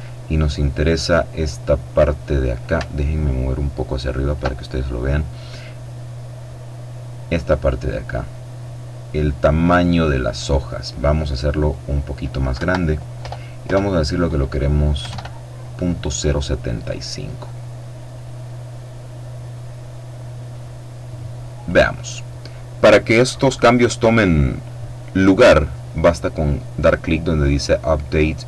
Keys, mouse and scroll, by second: 2.6-4.6 alt+drag, 9.4 click, 12.3 Right, 13.0 BackSpace, 14.8 KP_7, 14.9 KP_5, 16.6 click, 17.9-21.9 drag.